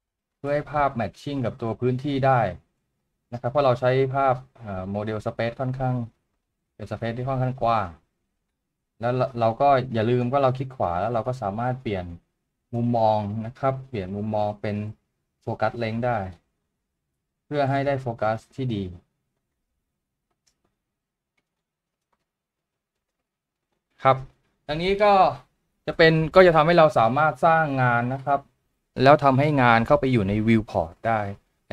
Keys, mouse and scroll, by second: 10.5 right click, 27.4 right click.